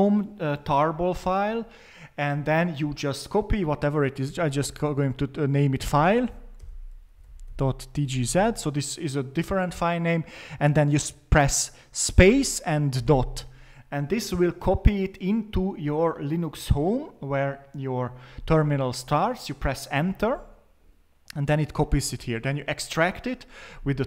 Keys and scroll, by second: 3.9-8.4 typing, 12.0-13.4 typing, 18.2 typing, 22.2 ctrl+c, 23.0 typing.